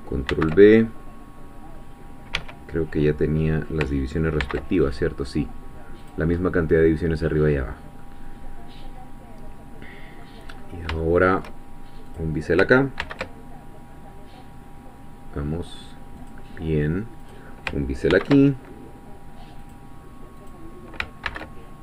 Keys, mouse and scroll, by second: 0.3 ctrl+b, 1.7-2.3 scroll up 2, 2.3 Escape, 3.1 middle click, 4.4 ctrl+b, 6.0 click, 6.4-7.5 middle drag, 7.6-8.0 scroll down 1, 8.0-10.4 middle drag, 10.5-10.9 scroll up 1, 11.0 shift+middle click, 12.1 click, 13.0 ctrl+b, 16.2 click, 17.3 click, 18.1 ctrl+b, 19.6-20.7 drag, 21.3 ctrl+b.